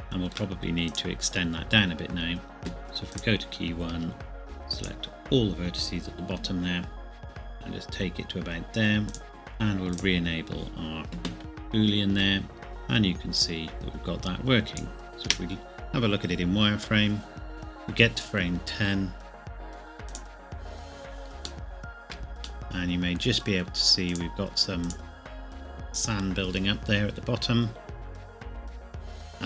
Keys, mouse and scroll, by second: 0.0 shift+middle click, 0.9 click, 3.1 click, 3.9 Tab, 4.4 click, 7.2 g, 9.1 click, 12.1 z, 12.7 click, 15.1 middle click, 15.2 space, 20.1 click, 21.4 h, 21.6 shift+middle click, 24.1 click.